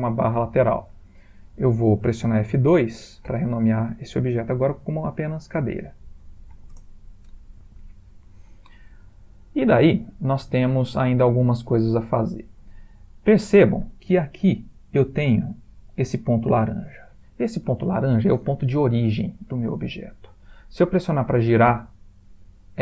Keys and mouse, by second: 3.3 F2, 9.0 middle click, 11.5 middle click, 12.8 ctrl+middle click, 17.4 ctrl+middle click, 17.8 ctrl+middle click, 17.8 ctrl+middle click, 18.1 ctrl+middle click, 18.2 ctrl+middle click, 19.0 ctrl+middle click, 19.6 ctrl+middle click, 21.7 r.